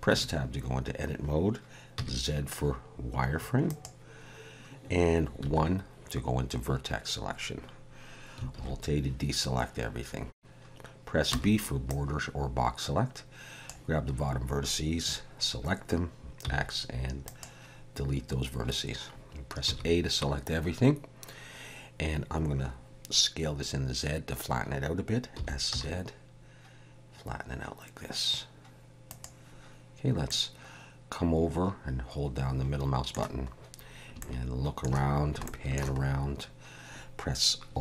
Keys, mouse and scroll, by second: 0.1 Tab, 2.0 z, 5.4 1, 8.6 alt+a, 11.3 b, 16.4 x, 19.7 a, 25.4 s, 30.3 middle click, 33.6-34.0 scroll up 2, 34.2 shift+middle click, 35.4 shift+middle click, 36.0-36.6 scroll up 2.